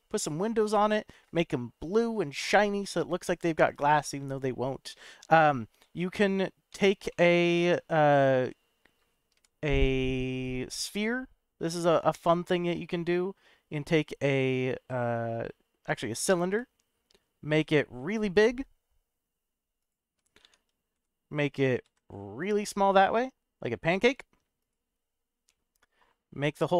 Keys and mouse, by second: 6.7 Tab, 7.1-7.9 middle drag, 9.3 shift+a, 17.4 s, 19.7 click, 20.4 Tab, 20.9 s, 21.8 z, 24.6 click, 25.4 middle click.